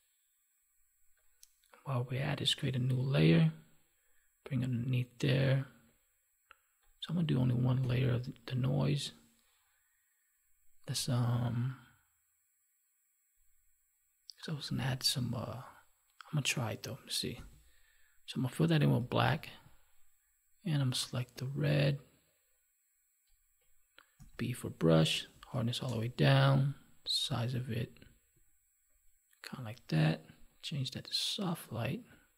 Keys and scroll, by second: 7.8 Delete, 19.2 alt+BackSpace.